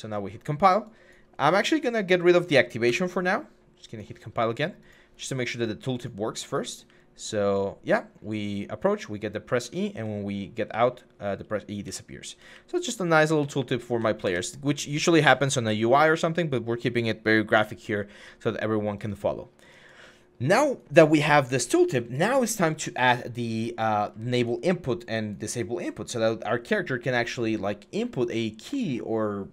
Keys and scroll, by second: 2.6 Delete, 6.6-7.3 typing, 9.4-13.7 typing, 14.0 Escape.